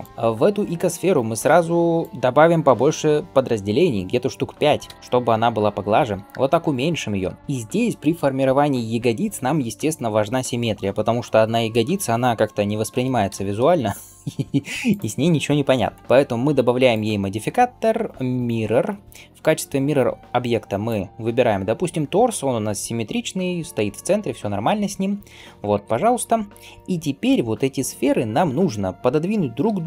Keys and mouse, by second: 0.0-13.2 middle drag, 2.0-5.0 drag, 5.1 s, 6.3 s, 13.4-14.7 middle drag, 14.7 click, 14.9-18.3 middle drag, 18.3-21.0 drag, 21.0-25.0 middle drag, 25.1 middle click, 25.6 ctrl+space, 25.6-29.8 middle drag, 29.5 g.